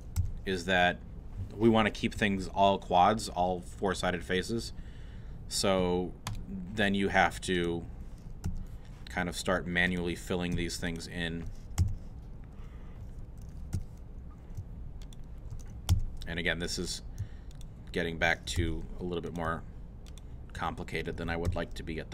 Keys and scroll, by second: 0.2 f, 8.5 e, 11.8 shift+f, 12.5 f, 13.7 2, 14.6 shift+2, 15.9 shift+f, 16.6 f, 18.6 shift+f, 19.3 f, 21.5 shift+f.